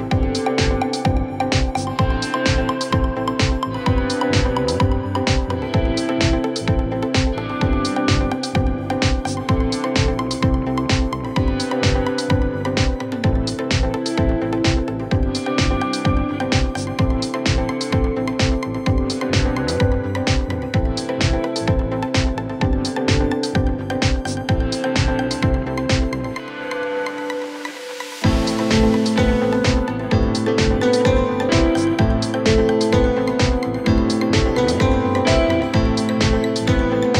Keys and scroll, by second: 1.5-13.9 typing, 30.6 typing, 35.0-37.1 typing.